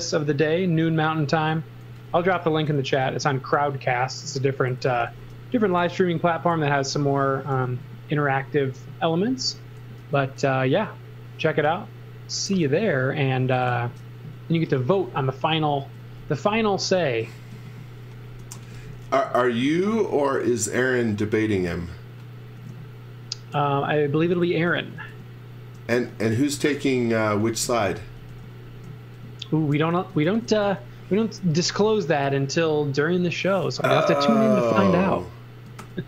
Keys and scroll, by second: 1.6-2.9 typing, 4.6-5.5 typing, 6.5 x, 6.9 z, 7.5 e, 10.0 super+z, 10.6 e, 13.6 super+z, 14.3-17.2 typing, 18.3-19.4 typing, 24.4-28.2 typing, 29.7-31.4 typing, 34.7 shift+5, 35.8 shift+5.